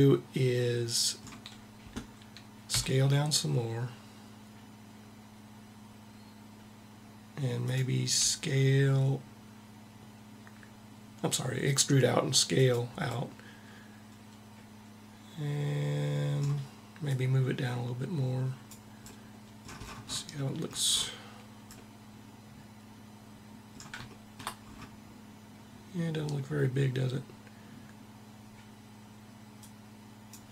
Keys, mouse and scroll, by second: 2.4 e, 7.4-8.9 drag, 8.0 s, 12.3-14.0 drag, 13.0-14.4 middle drag, 16.7-18.5 drag, 18.7-28.1 middle drag, 29.3-30.5 drag.